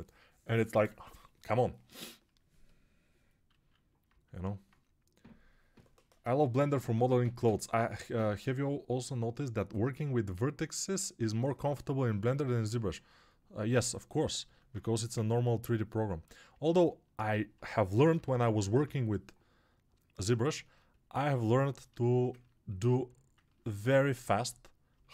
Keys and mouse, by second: 3.4 alt+q, 14.3 alt+q, 14.7 1, 16.8-20.4 alt+right drag, 17.4 g, 17.8 ], 20.4-25.1 alt+drag.